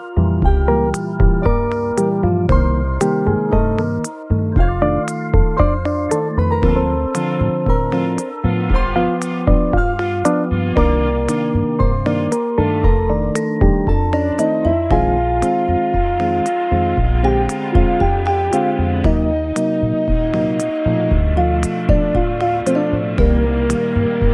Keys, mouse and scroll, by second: 0.5 shift+right click, 4.0 shift+a, 8.7 1, 8.8 6, 12.1 Tab, 14.4-15.0 scroll down 1, 15.1 scroll down 2, 15.7 s, 17.7 z, 18.5 s, 20.4 scroll up 1, 20.7 w, 20.9 s, 22.4 z, 23.4 ctrl+r.